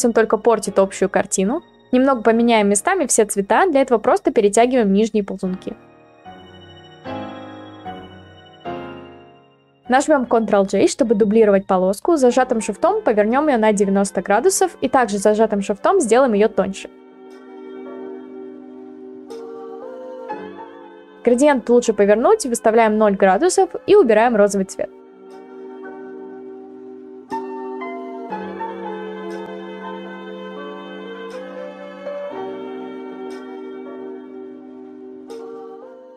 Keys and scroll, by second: 9.1 ctrl+z, 10.0 ctrl+j, 10.4 ctrl+t, 19.0 Return, 23.6 0, 23.7 Return, 33.6 ctrl+t, 35.6 Return.